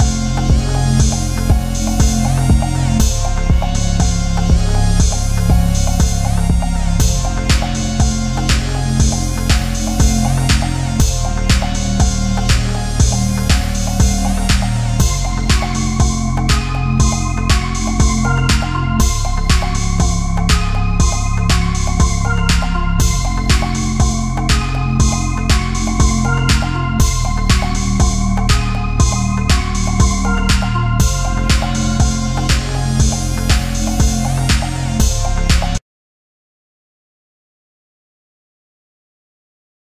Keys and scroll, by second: 1.7 Delete, 4.6 ctrl+c, 4.7 ctrl+v, 6.8 Right, 7.2 Down, 9.4 Up, 9.5 Down, 12.4 Down, 12.5 Left, 12.6 Down, 12.8 Up, 14.4 Down, 14.6 Left, 19.6-20.3 typing, 20.4 ctrl+a, 23.4 BackSpace, 23.5 a, 26.2 Down, 28.9 ctrl+z, 30.9 ctrl+0, 35.5 ctrl+=, 35.8 space, 38.8 ctrl+0.